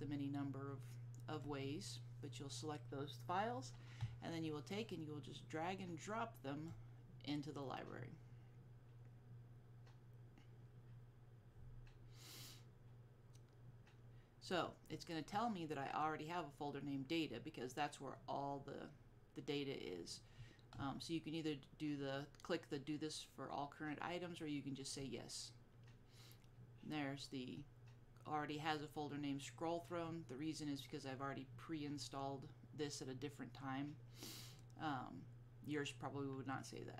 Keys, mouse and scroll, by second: 5.0 click, 25.0 click.